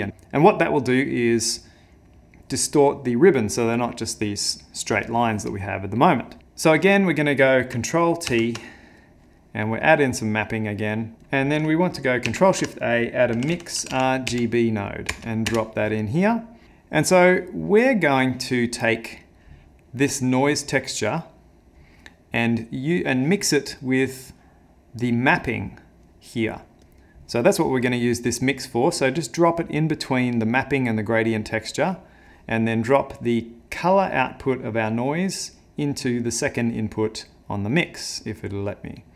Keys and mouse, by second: 6.4 click, 8.3 ctrl+t, 10.1 middle click, 11.2 click, 12.3 ctrl+shift+a, 16.6 middle click, 17.3 middle click, 18.2 click, 19.2 click, 20.1 click, 20.4 click, 23.2 click, 24.2 click, 26.8 click, 27.8 click, 31.7 click, 33.2 click, 33.9 click, 37.7 click.